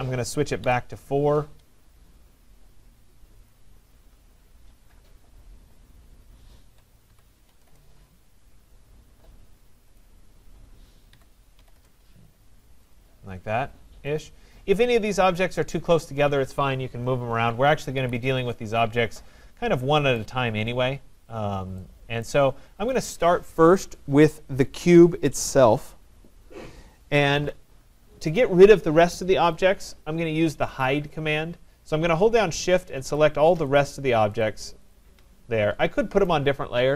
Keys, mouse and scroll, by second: 0.6-1.0 typing, 3.5 click, 7.1-7.6 typing, 10.0 click, 11.1-11.5 typing, 11.8 Return, 12.9 click, 13.6 middle click, 13.7 middle click, 14.2 click, 15.7 click, 18.0 Escape, 20.1 right click, 21.0 middle click, 21.1 middle click, 22.3 right click, 22.9 click, 28.5 click, 29.6 click, 30.7 click, 33.2 shift+click, 33.8 shift+click, 34.4 shift+click, 35.0 shift+click, 36.3 click.